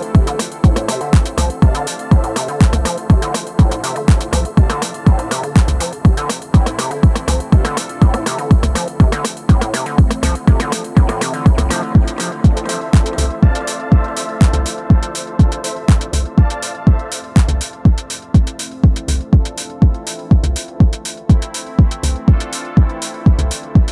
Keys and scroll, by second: 11.8 super+s, 12.6 Return, 13.1 Return.